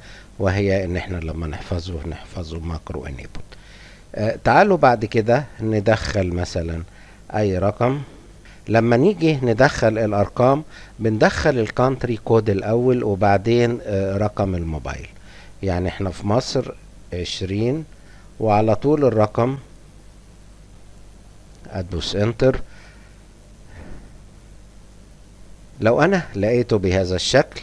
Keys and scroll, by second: 7.1-8.8 typing, 14.5-20.8 typing, 21.0 Return, 22.1 Return, 22.3-23.1 typing.